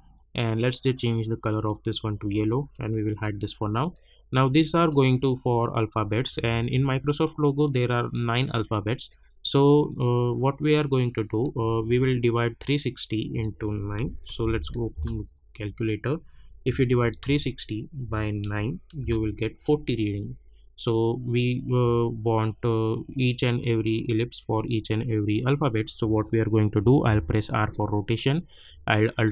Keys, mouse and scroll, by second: 6.3 space, 10.0 click, 11.5 space, 13.3 click, 13.7-14.9 typing, 14.9 Return, 19.0 Return, 20.9 click, 27.0 r, 29.1 alt+click.